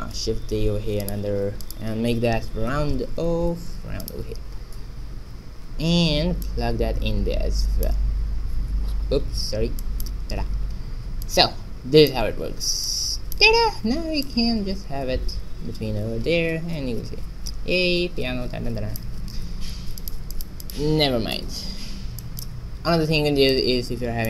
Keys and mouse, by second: 0.1 shift+d, 1.6-3.6 drag, 6.4-8.2 drag, 9.8-15.3 drag, 20.0-22.5 drag, 23.5 click.